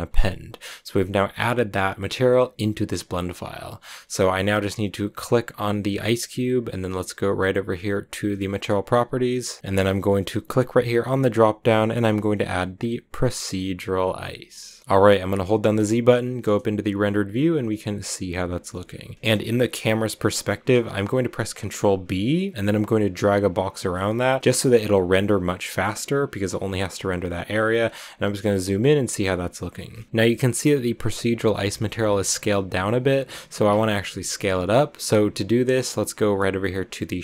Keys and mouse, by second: 10.1 ctrl+w, 10.8-14.4 drag, 15.2 z, 17.8 a, 21.2 ctrl+b, 23.8-24.2 shift+middle drag, 24.4 ctrl+b, 29.9-37.2 shift+middle drag.